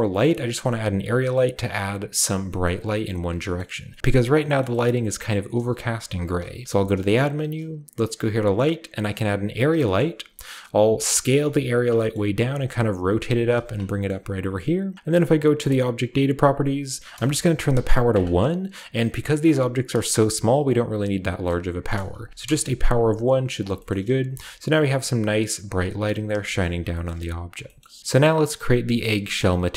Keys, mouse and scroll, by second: 0.7-2.4 middle drag, 0.7 scroll up 1, 2.6-3.4 middle drag, 3.1 scroll down 1, 3.6 middle drag, 3.6 scroll up 1, 4.0 middle click, 4.6 shift+middle click, 4.8-6.2 shift+middle drag, 6.6 shift+a, 9.0 click, 9.4 scroll down 2, 9.8-11.7 middle drag, 10.1 scroll down 2, 10.8 s, 11.7 click, 12.0 middle click, 12.2-14.1 typing, 12.4 click, 13.0 click, 13.3 click, 13.6 drag, 14.3 drag, 14.3 middle drag, 15.6 click, 16.1 click, 17.3 click, 17.7 1, 18.1 click, 19.0 click, 19.5-21.4 scroll up 1, 20.0-21.4 shift+middle drag, 22.1 g, 22.2-23.9 drag, 22.4 KP_0, 23.0 scroll down 1, 23.3 g, 23.8-25.5 shift+scroll up 1, 23.9-25.5 shift+middle drag, 24.2 a, 25.8-26.4 scroll down 1, 26.4 shift+scroll down 1, 26.5-27.6 shift+middle drag, 26.6-27.6 shift+scroll up 1, 27.6-28.0 shift+scroll up 1, 27.8-29.4 shift+middle drag, 28.0 a.